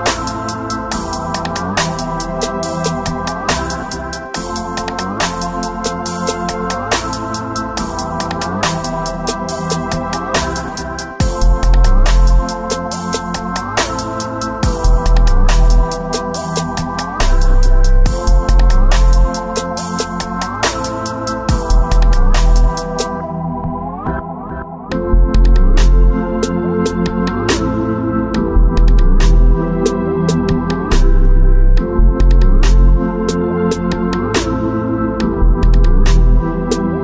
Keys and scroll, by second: 0.0 space, 0.9 space, 4.9 alt+space, 6.2 space, 8.5 space, 10.8 space, 11.6 space, 12.0 space, 13.0 alt+space, 14.1 alt+space, 15.0-17.4 typing, 22.7-25.7 typing, 28.8 space, 30.1 space, 32.9 space, 33.8 space, 34.6 space.